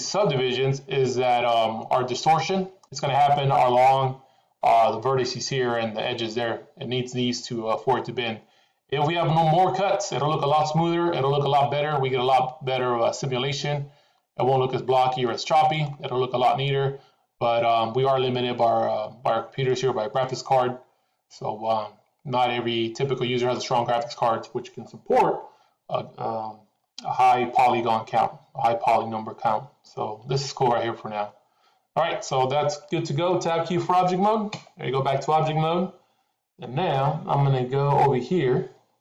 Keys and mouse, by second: 12.2-15.8 middle drag, 19.6-23.4 middle drag, 34.5 Tab.